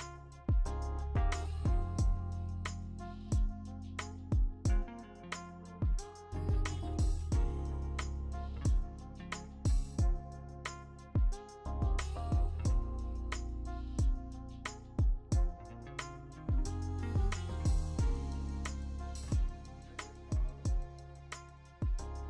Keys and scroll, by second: 1.6 w, 4.1 ctrl+d, 13.4 v, 15.1-15.5 v, 19.6 ctrl+alt+g.